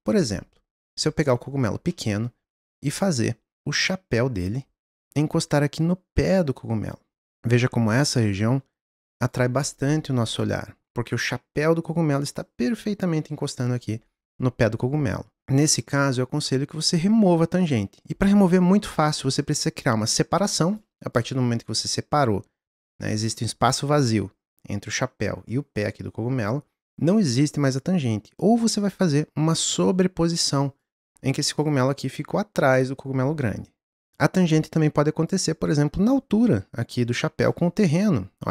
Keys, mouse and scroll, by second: 0.8 click, 1.1-1.9 scroll up 3, 1.9-3.2 middle drag, 2.8 click, 7.2 click, 7.2 t, 7.9-10.8 drag, 15.4-15.7 drag, 19.5 click, 21.1 click, 27.6 click, 28.6 click, 30.9 click, 31.4-34.0 middle drag, 34.0 click, 35.3 click, 37.8 click.